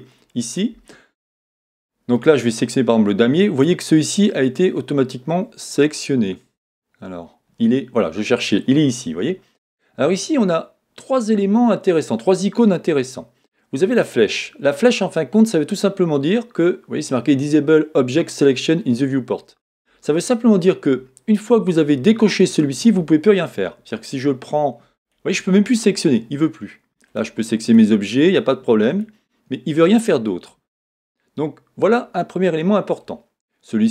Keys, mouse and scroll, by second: 0.1 click, 1.2 middle click.